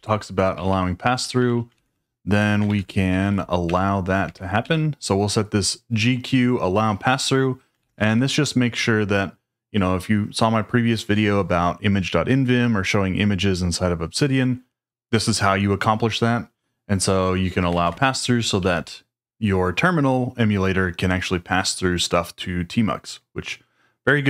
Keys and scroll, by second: 0.0-4.6 typing, 2.6 shift+super+v, 4.2 Escape, 7.5-8.4 typing, 17.7 shift+v, 18.2 Escape, 18.5 j.